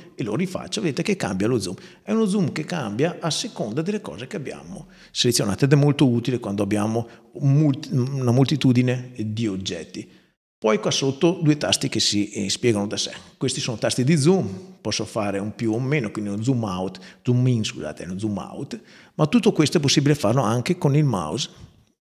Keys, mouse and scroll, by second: 0.1 click, 3.3 click, 13.9 click, 15.4 click, 16.2 click, 17.8 click, 21.3-21.8 scroll up 2.